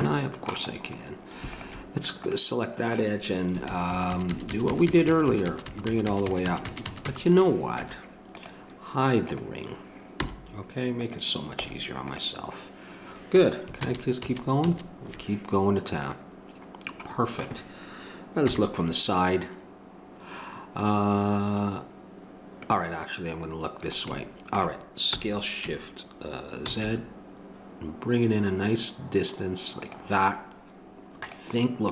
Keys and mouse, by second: 1.5-3.7 drag, 3.7 ctrl+KP_Add, 7.8 Tab, 9.3 click, 10.2 h, 11.0 click, 11.6 Tab, 13.8 ctrl+KP_Add, 18.4 KP_3, 25.1 s.